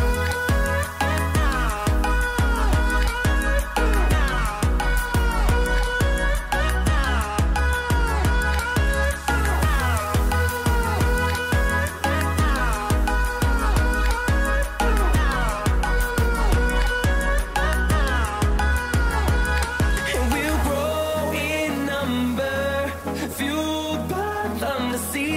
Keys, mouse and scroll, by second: 6.2 click, 9.1-23.8 drag, 24.0 click.